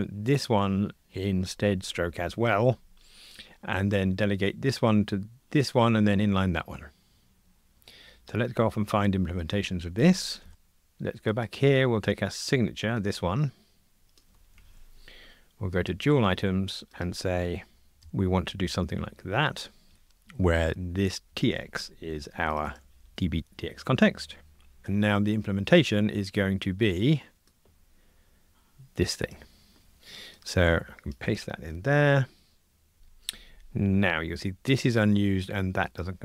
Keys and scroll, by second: 14.5 super+c, 18.0 super+v, 21.3 super+c, 23.0 super+v, 29.9 super+c, 31.6 super+v.